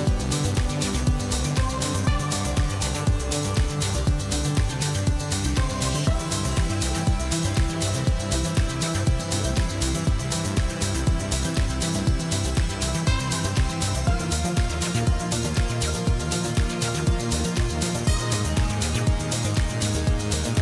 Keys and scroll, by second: 0.8-3.6 typing, 5.4 Tab, 5.8 Tab, 6.7-7.9 typing, 7.2 Return, 8.0 Return, 12.2 Tab, 12.6 Tab, 13.5 Tab, 13.8 Tab, 14.5 ctrl+z, 14.6 2, 14.9 ctrl+b, 15.0 ., 15.2 Return, 15.5 3, 16.6 m, 16.8 s, 16.8 i, 16.9 l, 17.1 Return, 18.2 x, 18.3 ctrl+v.